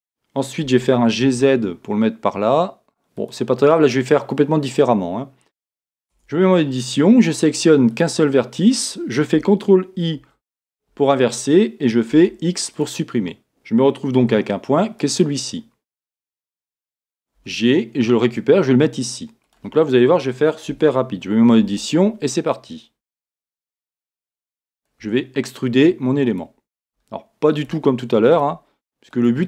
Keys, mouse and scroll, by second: 0.7 g, 6.2 Tab, 8.0 click, 10.2 ctrl+i, 12.8 x, 15.0 x, 17.5 g, 20.7 Tab, 25.1 e.